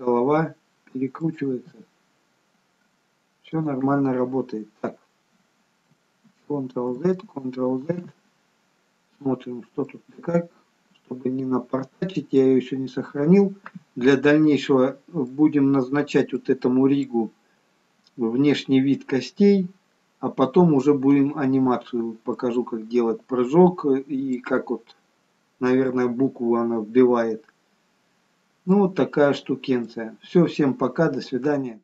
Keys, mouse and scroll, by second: 0.0 middle click, 1.7 r, 6.6 ctrl+z, 7.2 ctrl+z, 9.9 middle click, 12.8 scroll up 1, 13.5-14.1 scroll down 2, 14.1 middle click, 16.0-16.4 scroll up 2, 16.4 middle click, 22.5 middle click, 28.3-28.7 scroll down 2, 28.7 middle click.